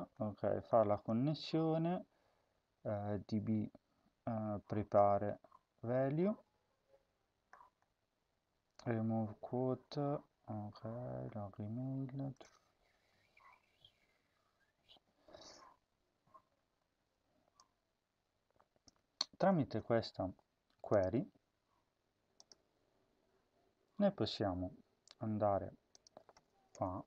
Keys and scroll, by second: 19.4 ctrl+c, 26.6 Return.